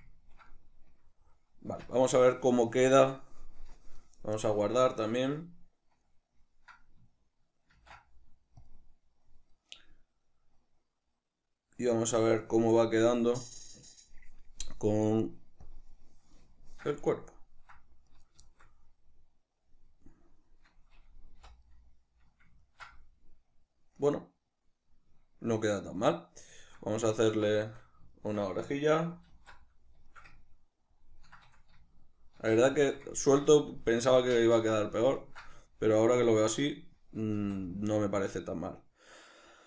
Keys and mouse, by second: 1.7 Tab, 2.8 shift+middle click, 7.8 ctrl+s, 15.7 drag, 16.6-18.1 shift+middle drag, 18.1 right click, 18.5-30.1 shift+middle drag, 21.4 h, 29.4 alt+q, 32.4 shift+c, 32.8 shift+middle click, 33.8-39.6 shift+middle drag, 37.4 shift+a.